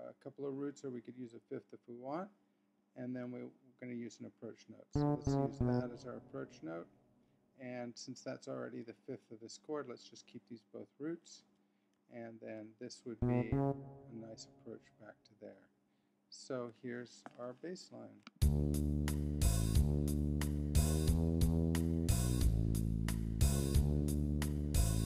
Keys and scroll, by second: 1.2 Right, 4.9 Down, 9.1 Left, 10.3 Right, 13.2 Up.